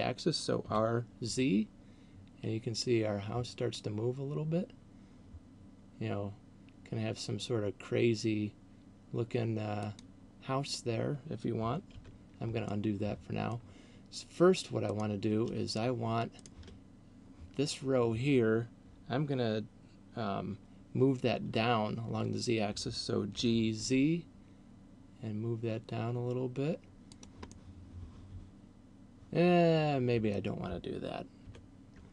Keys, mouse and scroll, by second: 1.0 r, 10.0 click, 12.0 ctrl+z, 12.5 middle click, 15.0 right click, 15.7 shift+right click, 16.5 shift+right click, 23.5 g, 27.2 click, 27.7 middle click, 31.5 ctrl+z.